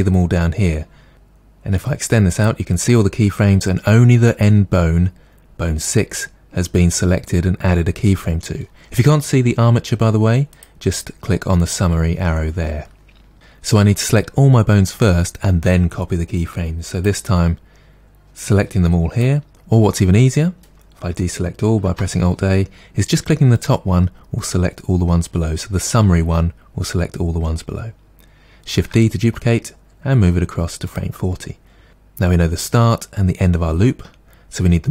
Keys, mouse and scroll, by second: 0.6 scroll down 1, 1.8-12.0 drag, 16.9 click, 18.4 click, 21.9 alt+a, 23.6-25.3 drag, 28.8 shift+d, 30.9 click.